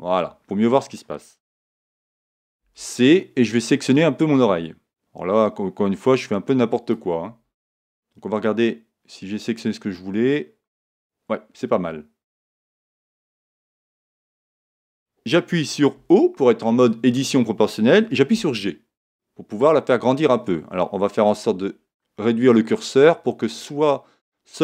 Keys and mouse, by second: 2.6 c, 7.9-11.4 middle drag, 13.5-15.3 middle drag, 15.9 o, 18.3 g.